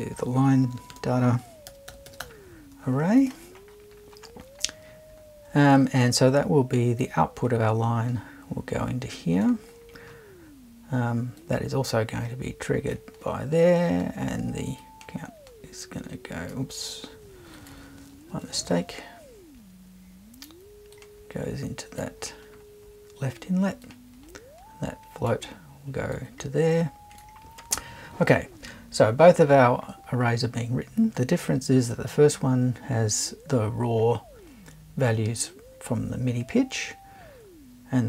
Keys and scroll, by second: 0.6-2.7 typing, 18.3 BackSpace.